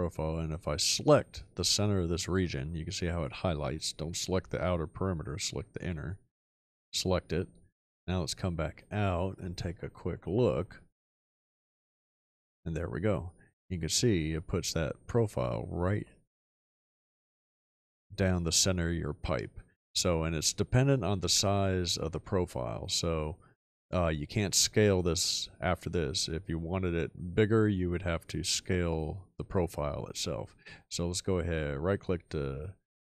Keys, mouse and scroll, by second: 10.1 shift+middle click, 15.7-16.7 middle drag, 15.7-17.7 scroll up 2, 17.7-19.0 scroll down 2.